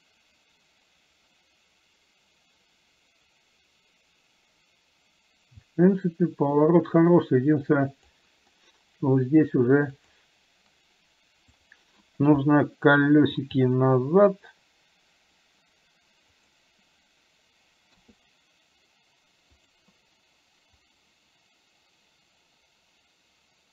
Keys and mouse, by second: 10.2 click, 21.1-23.7 drag.